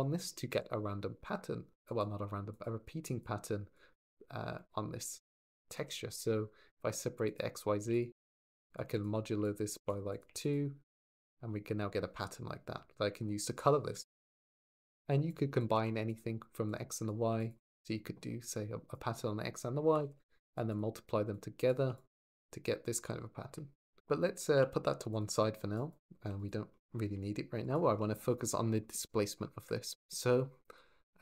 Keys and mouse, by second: 2.4 click, 2.8 click, 3.5 click, 7.0 click, 7.7 ctrl+shift+click, 8.5 click, 9.3 shift+click, 10.0 click, 15.6 shift+d, 15.9 click, 16.5 click, 17.2 ctrl+shift+click, 18.3 click, 20.5 drag, 21.1 drag, 21.7 ctrl+shift+click, 24.3 g, 24.5 y, 25.5 click, 26.0 g, 26.2 click, 27.4 ctrl+shift+click.